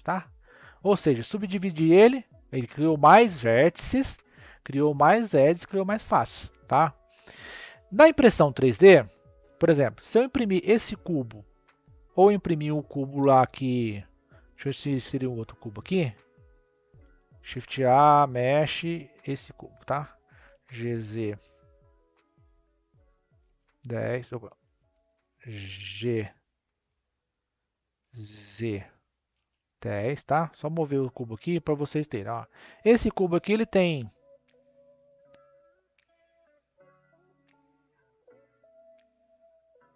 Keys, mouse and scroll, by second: 1.2 Tab, 7.7-8.5 scroll up 1, 8.5-9.6 middle drag, 9.6-10.9 scroll up 1, 14.1 scroll down 2, 15.1 shift+a, 17.3 shift+a, 18.3-20.4 drag, 20.4 g, 24.8 Escape, 25.7 g, 31.0 click, 32.7 click, 34.3 click, 35.0 click, 35.7 click.